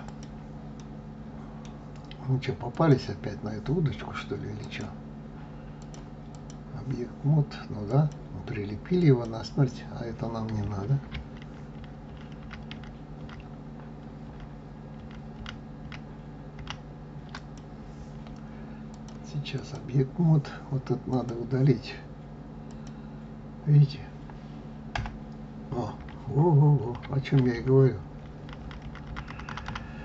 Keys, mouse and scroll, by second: 0.0 click, 0.7-2.6 middle drag, 2.6 click, 4.5 click, 5.7-8.0 drag, 8.9 click, 11.4 ctrl+z, 11.7 ctrl+z, 12.0 ctrl+z, 12.4 ctrl+z, 12.7 ctrl+z, 13.1 ctrl+z, 14.2 ctrl+z, 14.9 ctrl+z, 15.3 ctrl+z, 15.7 ctrl+z, 16.5 ctrl+z, 17.3 click, 18.8-21.2 drag, 22.6 click, 24.9 Delete, 26.7 ctrl+z, 28.1 ctrl+z, 28.4 ctrl+z, 28.6 ctrl+z, 28.8 ctrl+z, 29.0 ctrl+z, 29.2 ctrl+z, 29.4 ctrl+z, 29.6 ctrl+z.